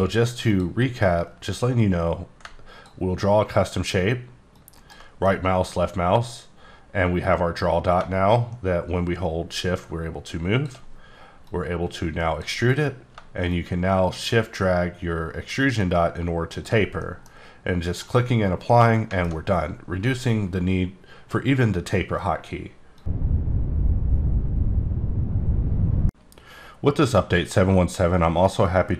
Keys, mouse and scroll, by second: 0.5 click, 1.2 click, 4.5 ctrl+click, 4.7 ctrl+right click, 5.2 middle click, 7.2 click, 13.5 shift+click, 17.0 middle click, 17.9 click, 18.7 middle click.